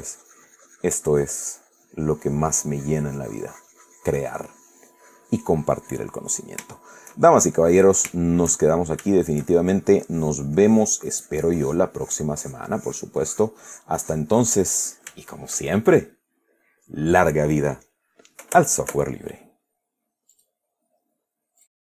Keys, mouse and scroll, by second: 6.4 click, 7.0-7.7 shift+middle drag, 8.4 shift+middle click, 10.3-11.8 shift+drag, 12.9-15.4 drag, 15.4-16.7 shift+middle drag, 16.8 middle click, 20.6 click.